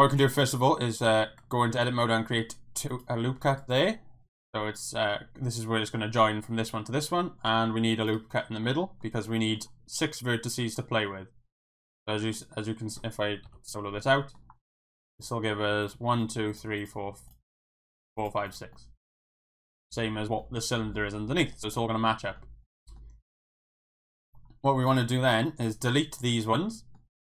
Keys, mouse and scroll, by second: 0.6 ctrl+r, 1.1 Tab, 1.9 ctrl+r, 7.5 ctrl+r, 8.1 right click, 8.7 middle click, 9.3 middle click, 10.8 middle click, 12.0 middle click, 12.4 middle click, 13.4 KP_Divide, 14.2 middle click, 15.2 click, 15.8 click, 16.8 click, 17.3 click, 18.2 click, 18.7 middle click, 20.4 middle click, 21.8 middle click, 22.6 middle click, 24.8 click, 25.6 click, 25.7 x, 26.4 middle click.